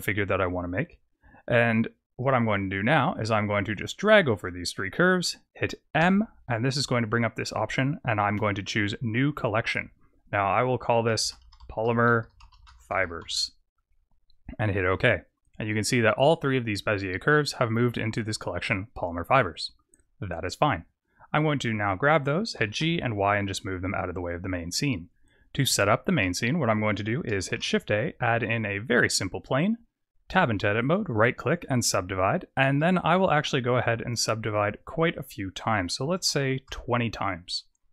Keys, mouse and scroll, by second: 2.0 click, 3.6 click, 5.9 m, 19.4 click, 19.8 click, 20.4-20.9 scroll up 4, 20.9-21.2 scroll down 6, 21.2 click, 22.5 g, 23.9 click, 24.4-25.1 scroll up 2, 25.1-25.5 scroll up 2, 25.7 shift+middle click, 27.4 shift+a, 30.2 Tab, 30.7 right click, 31.9-32.6 scroll up 2, 32.6 scroll up 3, 32.7 shift+middle click, 34.5 click, 35.0 click.